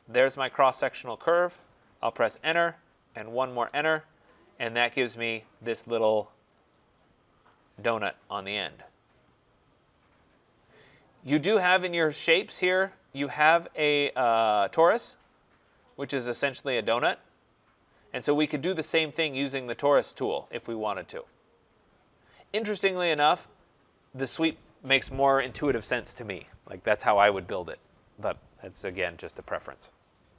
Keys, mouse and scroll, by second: 0.0 click, 2.0 Return, 3.4 Return, 4.8 click, 6.4 click, 6.8 scroll, 7.5 middle click, 10.5 right click, 12.8 right click, 16.4 click.